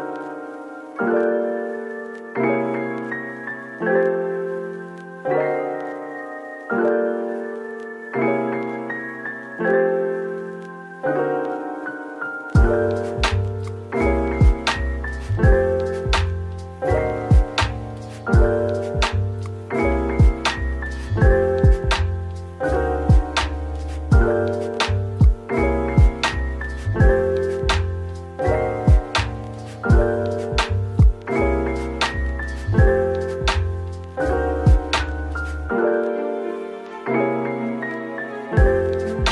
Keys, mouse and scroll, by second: 1.1-1.5 typing, 4.0 scroll, 4.0 scroll up 1, 4.6-5.6 typing, 6.7-8.8 typing, 10.5-11.0 typing, 12.7-13.2 typing, 14.1 double click, 14.7-15.6 typing, 16.6-16.9 typing, 18.1 typing, 18.5-19.3 scroll down 2, 19.7-20.1 scroll down 1, 20.1 middle click, 22.4-22.9 scroll up 1, 22.9 middle click, 24.4 scroll down 1, 24.7 middle click, 25.6 scroll up 1, 30.6-33.4 scroll down 1, 34.8 shift+right click, 35.6 typing, 37.9 typing, 39.2 typing.